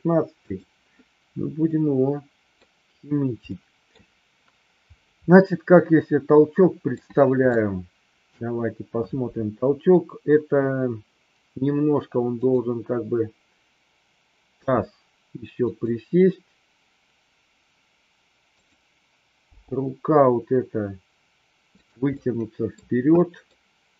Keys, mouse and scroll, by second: 0.5 click, 1.7-2.5 middle drag, 3.5 middle click, 5.2-6.8 middle drag, 7.5-8.2 shift+middle drag, 12.2 click, 14.5 g, 15.6 click, 18.5 click, 19.5 g, 21.7 click, 22.1 middle click, 22.7 scroll down 1, 23.1 scroll up 1, 23.2 middle click.